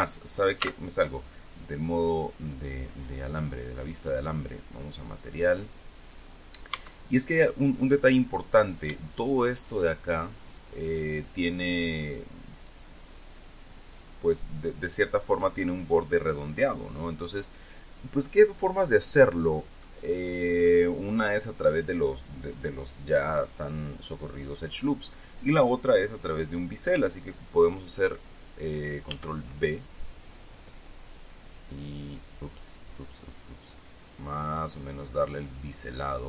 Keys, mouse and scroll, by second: 1.2 z, 4.7 click, 6.0 click, 7.3 Tab, 8.6-10.4 right drag, 12.3 shift+right click, 13.1 shift+right click, 14.4 shift+right click, 29.7 ctrl+b.